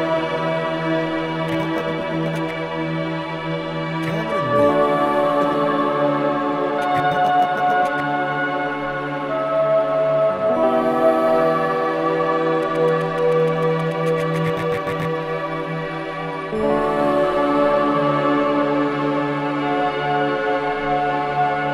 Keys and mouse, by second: 3.2 typing, 4.6 typing, 5.3-21.7 drag.